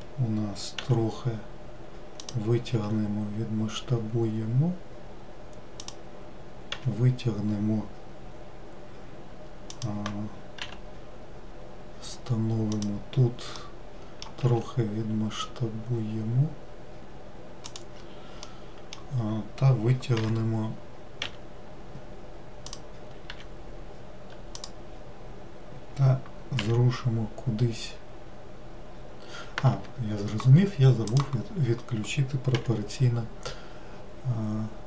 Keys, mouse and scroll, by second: 0.8 e, 10.6 g, 13.5 middle click, 14.4 s, 18.4-20.2 middle drag, 20.2 g, 31.1 click.